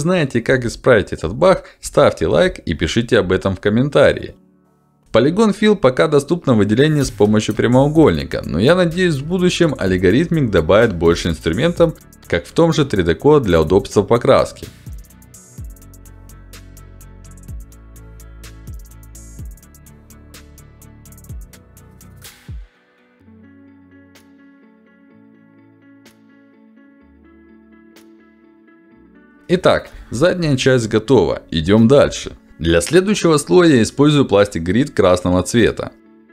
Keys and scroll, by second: 1.0 ctrl+z, 1.7 ctrl+z, 3.1 ctrl+z.